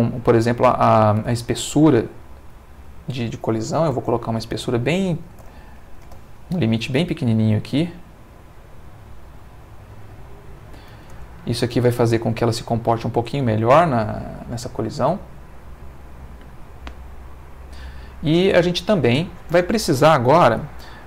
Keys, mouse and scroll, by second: 2.5 ctrl+click, 3.8 Right, 4.2 BackSpace, 5.4 0, 5.6 1, 6.0 Return, 9.4-10.8 drag, 11.1 space, 18.8 Escape.